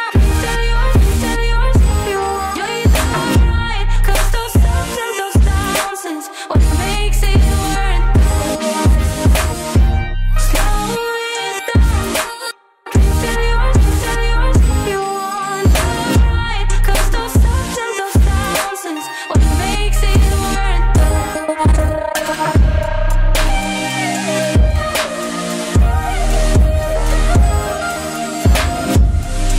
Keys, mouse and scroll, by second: 13.2 space, 15.7 space, 21.0 ctrl+a, 21.6-25.8 drag, 26.9 right click, 27.7 click.